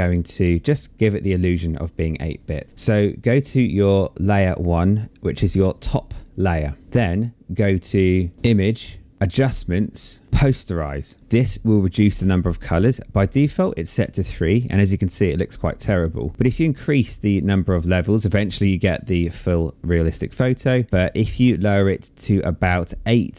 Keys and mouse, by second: 3.7 click, 8.3 click, 10.9 click, 16.1 click.